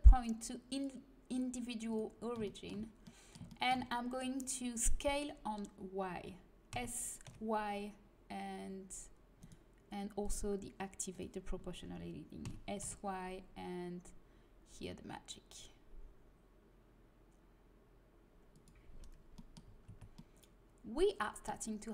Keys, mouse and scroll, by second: 2.4-6.7 middle drag, 6.7 s, 10.3-12.4 drag, 12.4 s, 19.3 middle click, 19.6 a, 19.8 Tab.